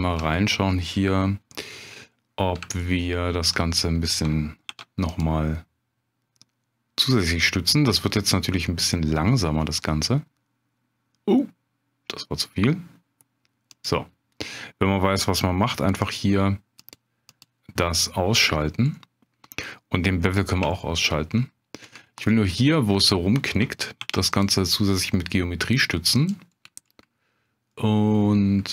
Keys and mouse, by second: 2.8 shift+click, 4.7 ctrl+r, 13.7 click, 16.1 click, 17.3 click, 18.9 middle click, 20.2 click, 20.8 shift+click, 24.0 ctrl+r, 26.2 click, 27.7 middle click.